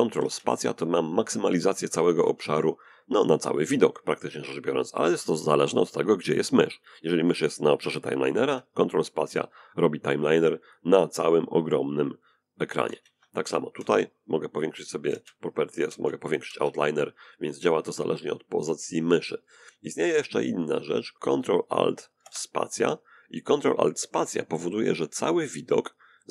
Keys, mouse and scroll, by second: 0.9 ctrl+space, 7.0 ctrl+space, 8.7-10.7 drag, 9.3-10.7 right drag, 11.5 ctrl+space, 13.7 ctrl+space, 14.5 ctrl+space, 15.1 ctrl+space, 19.1 right click, 21.1 ctrl+alt+space.